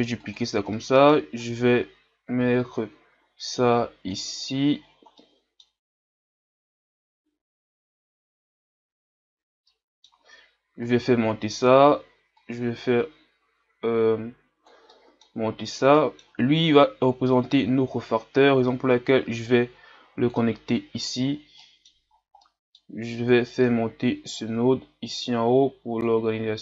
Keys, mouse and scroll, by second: 0.8-8.9 middle drag, 9.0-10.9 middle drag, 10.9-12.7 drag, 17.3-20.5 drag, 23.3 click.